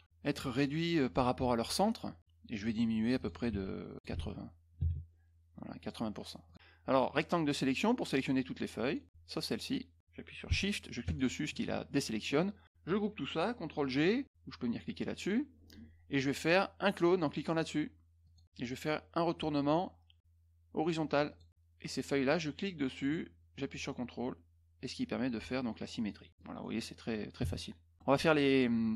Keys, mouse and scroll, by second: 3.1 click, 3.4 ctrl+a, 4.1 ctrl+a, 5.8 click, 6.4 click, 7.1-8.9 drag, 11.0 shift+click, 15.0 click, 18.2 click, 21.2 click, 22.6-26.0 drag, 26.3 middle click, 26.6 middle click, 27.9 middle click.